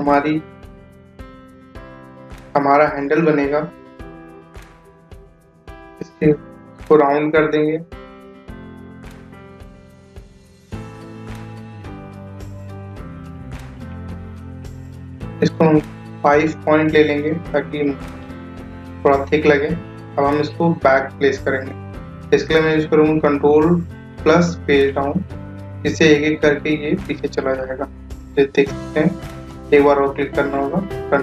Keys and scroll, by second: 21.6 ctrl+Page_Down.